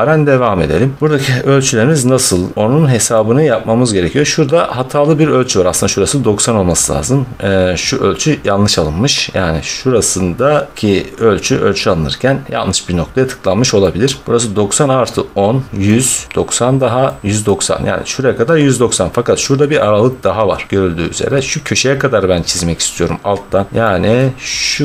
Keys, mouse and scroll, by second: 1.0 middle click, 1.4 scroll, 3.0 scroll, 6.6 middle click, 6.6-7.0 middle click, 6.8 middle click, 6.9 middle click, 7.2 middle click, 7.2 middle click, 7.4 middle click, 8.2-9.2 scroll, 10.5 scroll down 4, 13.1 middle click, 13.1 scroll up 1, 13.7 scroll, 14.2-15.1 scroll, 16.1 middle click, 17.3 scroll, 23.7 middle click, 24.1 middle click.